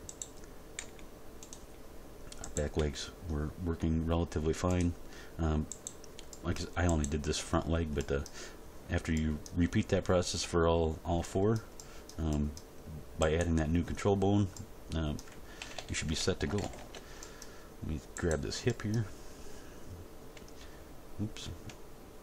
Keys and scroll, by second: 0.7 g, 2.7 g, 15.6 a, 16.4 alt+r, 16.6 alt+g, 16.8 alt+s, 20.3 h.